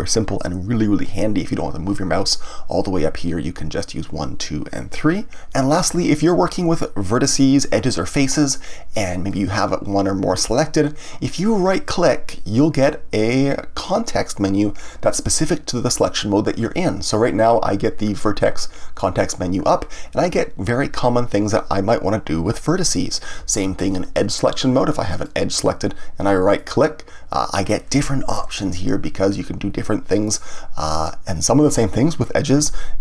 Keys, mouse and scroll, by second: 0.0 3, 0.7 1, 9.3 click, 13.8-16.9 right drag, 24.2 click, 25.1 click, 26.5-33.0 right drag.